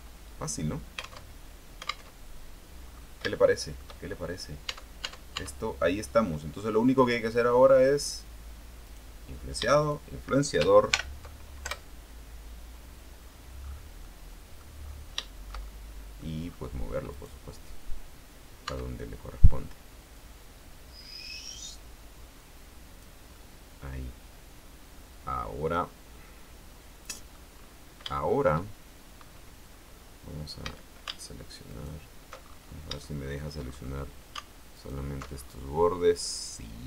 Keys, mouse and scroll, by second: 0.2 alt+Tab, 1.3 alt+Tab, 2.2 alt+Tab, 3.0-3.3 scroll up 2, 3.4 shift+middle click, 4.2 shift+scroll down 2, 4.8 Tab, 9.0 right click, 9.9 shift+right click, 11.0 ctrl+shift+l, 11.8 ctrl+Return, 13.3-13.7 scroll down 2, 13.7-14.1 scroll up 2, 14.2 middle click, 15.4-16.5 shift+middle drag, 16.6 scroll up 2, 17.2 right click, 18.8 Tab, 20.3-23.4 drag, 23.5-25.7 middle drag, 25.8-27.6 middle drag, 27.6-28.1 scroll up 2, 28.2 shift+middle click, 29.8 scroll up 2, 30.8 a, 31.8 alt+shift+right click, 32.6-33.2 alt+shift+scroll up 3, 33.2 shift+middle click, 34.2 scroll up 1, 34.9 alt+shift+right click, 35.5-36.2 alt+shift+scroll down 4, 36.2-36.8 middle drag.